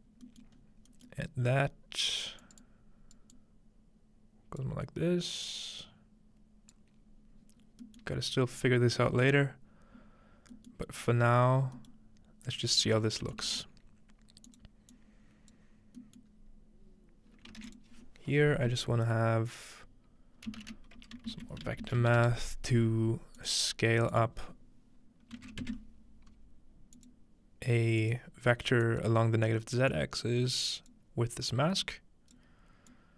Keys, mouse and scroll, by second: 0.3-1.3 scroll up 3, 2.4-8.6 drag, 7.0-8.6 scroll down 4, 8.6-9.1 scroll down 1, 11.0-11.8 scroll down 2, 11.8-12.9 scroll down 1, 13.2-16.2 shift+drag, 13.5 shift+d, 16.3-17.2 scroll up 2, 17.6 shift+a, 17.7 shift+click, 20.5-22.3 typing, 23.4 click, 24.1 click, 25.4 typing, 27.0 click, 28.0 click, 28.9 click, 29.9-30.9 drag, 31.8 click, 32.7-33.1 drag.